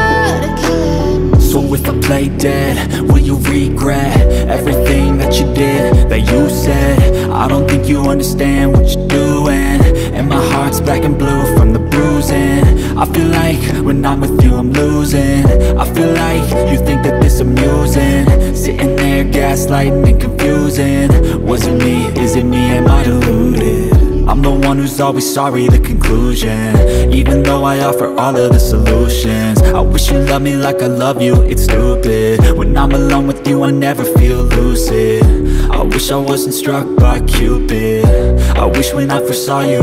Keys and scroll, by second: 0.0-2.0 typing, 5.0-7.5 typing, 7.4 Escape, 9.1 h, 9.3 Escape, 10.4 Escape, 10.7 h, 11.0 o, 11.6 alt+1, 12.4 Escape, 12.6-16.1 typing, 13.1 ctrl+z, 15.7 ctrl+z, 16.0 Escape, 17.2 space, 18.8 Delete, 19.2 Escape, 19.3-20.2 typing, 21.9-30.3 typing, 22.2 Escape, 29.8 Escape, 31.8 space, 33.8 h, 34.1 Escape, 35.1 Escape, 36.4 BackSpace, 36.8 Return.